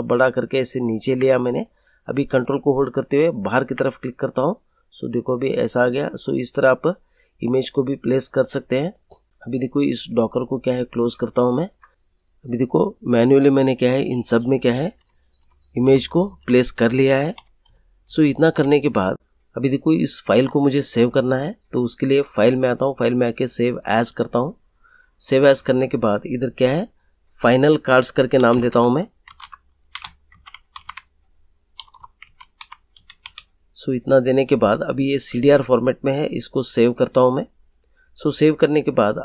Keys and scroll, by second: 14.9 Page_Down, 17.3 Page_Up, 28.3-33.2 typing.